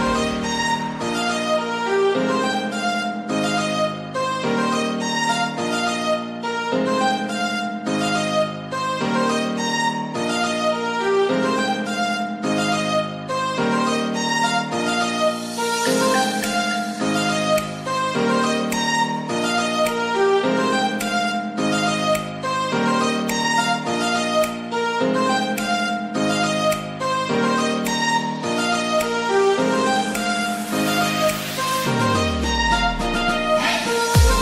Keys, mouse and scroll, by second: 0.2 scroll down 1, 0.3 middle click, 0.8 Tab, 1.1-1.6 scroll down 1, 1.6 scroll down 1, 1.7 alt+z, 2.0 middle click, 2.7 g, 5.3 click, 5.6-7.4 middle drag, 7.4-9.8 drag, 9.8 KP_3, 10.5-11.3 scroll up 7, 11.3 shift+middle click, 11.7-12.2 scroll up 2, 12.2 r, 12.9 click, 13.7 KP_1, 14.5-14.8 scroll up 3, 14.8-16.2 shift+middle drag, 16.2 l, 16.2 g, 17.3 click, 18.6-19.5 scroll down 2, 19.5 g, 22.6 scroll down 2, 22.8 middle click, 23.6-24.4 scroll up 4, 24.4 scroll down 2, 24.7 click, 24.9-28.0 middle drag, 29.0 scroll down 1, 29.2-31.9 middle drag, 31.9 KP_1, 32.7-33.2 scroll up 2, 33.2-34.4 shift+middle drag.